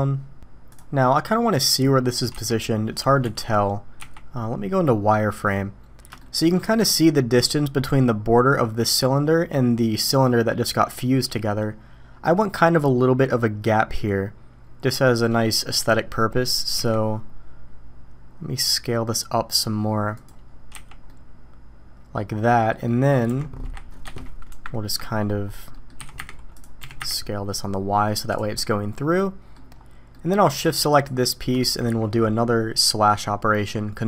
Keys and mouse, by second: 2.3 s, 4.0 z, 6.2 shift+drag, 16.7 s, 20.7 z, 21.1-22.2 drag, 22.5 middle click, 22.8 middle drag, 23.3 g, 25.7 middle click, 26.0 s, 26.8 g, 28.5-29.5 middle drag, 30.1 drag.